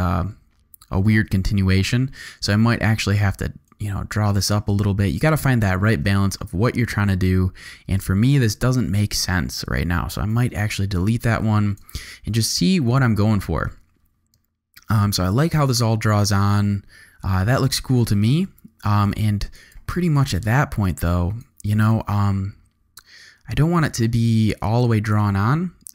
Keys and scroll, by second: 1.1 space, 5.9 space, 7.8 space, 10.3 BackSpace, 11.8 space, 18.4 space.